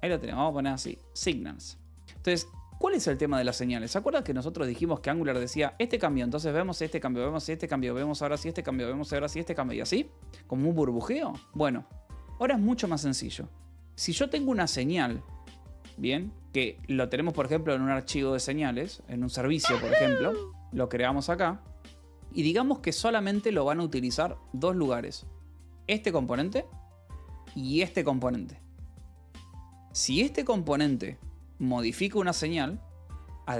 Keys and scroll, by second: 11.7 ctrl+z.